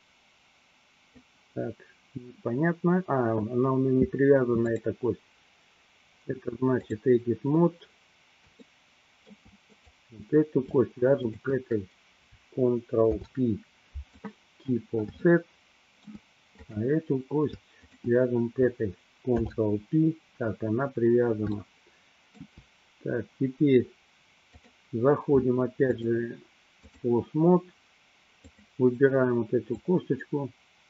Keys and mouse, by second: 4.6-7.2 drag, 9.0 shift+middle click, 10.0 click, 11.5 shift+click, 13.1 ctrl+p, 15.5 shift+middle click, 16.8 click, 18.1 shift+click, 19.5 ctrl+p, 21.6-22.9 shift+middle drag, 26.0-27.1 drag, 30.0-30.8 drag.